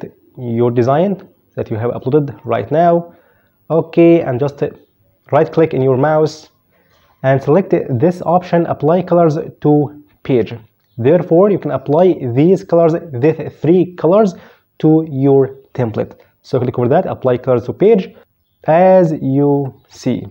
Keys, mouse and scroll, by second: 0.5 click, 2.6 click, 5.7 right click, 17.6 click, 19.4 click.